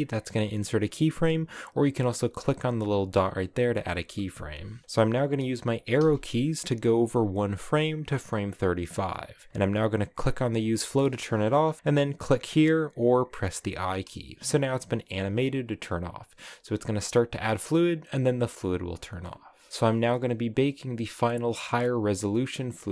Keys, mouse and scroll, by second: 2.4 click, 3.0 click, 5.6 Right, 9.9 click, 12.3 click, 15.8-18.9 drag, 19.7-22.9 right drag.